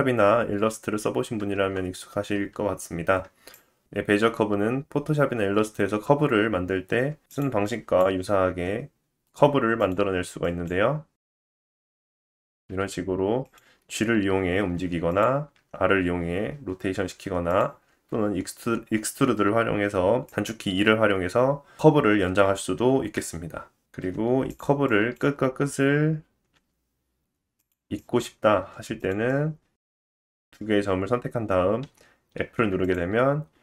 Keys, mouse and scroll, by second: 1.6 Tab, 3.5 click, 8.5 click, 9.6 r, 11.0 click, 12.7 g, 14.6-18.1 drag, 15.6 g, 15.6 r, 18.1 e, 24.0 g, 24.9-27.7 drag, 26.6 e, 28.0 click, 28.6 g, 29.1 click, 32.9-33.6 drag.